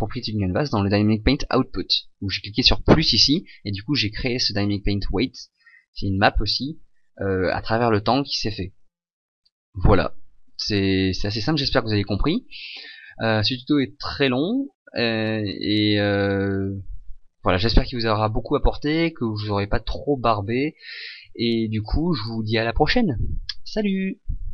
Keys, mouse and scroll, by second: 1.2 scroll down 1.